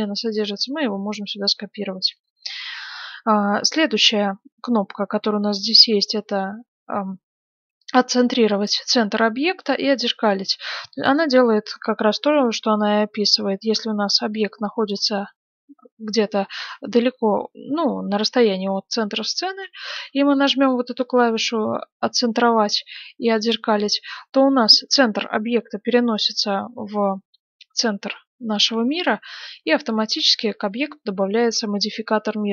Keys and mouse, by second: 0.3-6.8 middle drag, 9.8-12.2 middle drag, 12.3-14.3 middle drag, 14.3-16.4 drag, 16.5-23.3 middle drag, 23.3-26.4 drag, 26.4-32.5 middle drag.